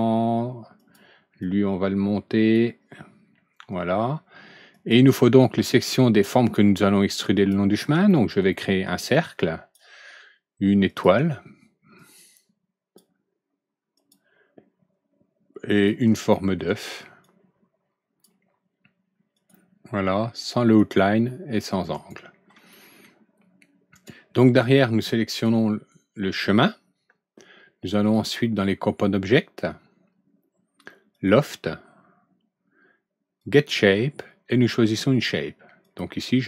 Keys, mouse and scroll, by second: 0.7 click, 1.4-2.5 drag, 4.7 click, 7.3 click, 8.0-8.4 middle drag, 9.1 click, 10.8 click, 11.9-12.9 drag, 13.9 click, 15.7 click, 16.2 middle click, 17.2-18.2 drag, 19.3 click, 20.6 click, 21.9 right click, 22.6 middle click, 23.1 scroll down 1, 23.9 right click, 25.3 click, 28.0 click, 31.1 click, 33.4 click, 35.8 click.